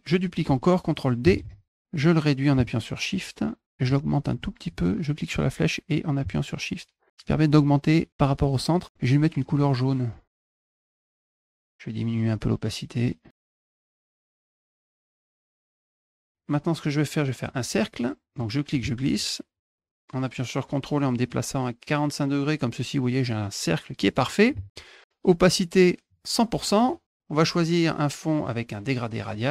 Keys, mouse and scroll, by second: 1.8-3.6 drag, 4.5-7.1 shift+drag, 10.1 click, 10.7 click, 10.9 click, 11.3 click, 12.0-13.5 drag, 13.7 click, 14.5 click, 14.7 middle click, 15.3 middle click, 15.7 click, 17.2 click, 18.2-23.9 drag, 25.3 right click, 25.9 click, 26.3 space, 29.0 click.